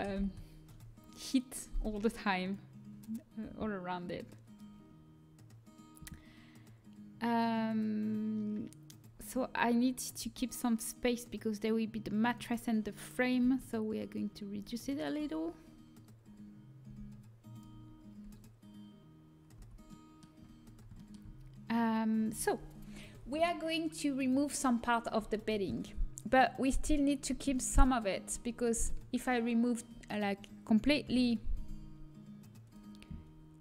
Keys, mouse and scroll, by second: 0.1 ctrl+p, 2.4-4.2 drag, 4.2-8.0 middle drag, 9.0-10.1 middle drag, 10.1 s, 17.4 g, 20.2 a, 26.2-27.9 drag, 27.1 middle click, 27.1 right click.